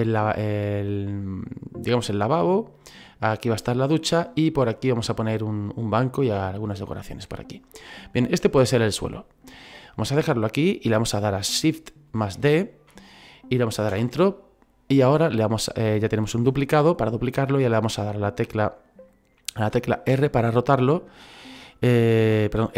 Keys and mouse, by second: 8.0 middle click, 12.3 shift+d, 20.1 r.